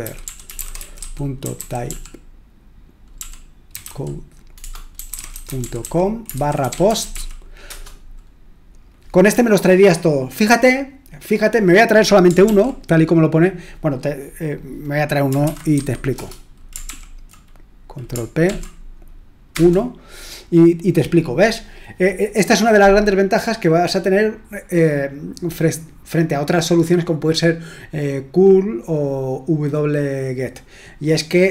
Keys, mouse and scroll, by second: 0.0-7.6 typing, 7.6 Return, 12.4 ctrl+p, 15.4-15.7 typing, 16.1 Return, 16.8 ctrl+l, 18.4 ctrl+p, 19.4 Return.